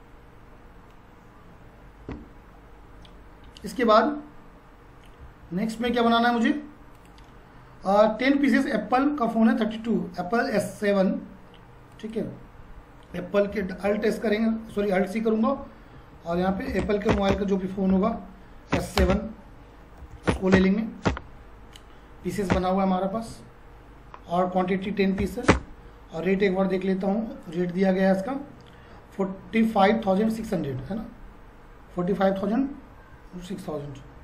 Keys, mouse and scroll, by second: 3.5 F4, 5.9 F4, 6.9 click, 11.9 click, 13.6 alt+c, 15.7-17.3 typing, 18.7 End, 19.0-20.5 typing, 22.2 Down, 22.5 Return, 23.1 ctrl+a, 24.9-25.2 typing, 25.4 Return, 27.4 click, 30.1 click, 32.9 F4.